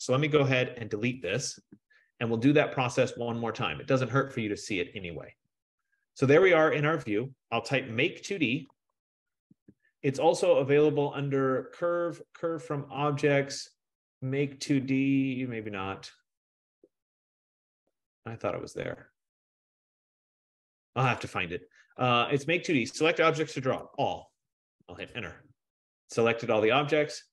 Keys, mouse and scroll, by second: 0.9-2.0 typing, 3.7-6.4 drag, 6.4 typing, 8.3-9.6 typing, 11.2-11.9 typing, 11.3 click, 13.5 F15, 21.4-26.3 drag, 23.6-24.7 typing, 25.0 Return, 26.3 typing.